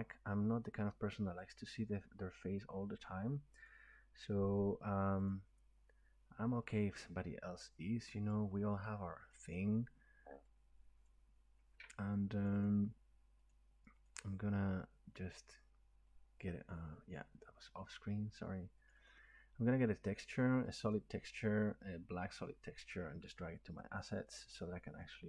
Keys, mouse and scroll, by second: 1.5 click, 3.7 click, 5.5 click, 8.3 click, 11.1 click, 12.5 click, 12.6 click, 13.5 click, 14.1 click, 14.2 click, 17.9 click, 18.9 click, 19.1 click, 20.8 click, 20.9 click, 21.4 click, 23.8 click.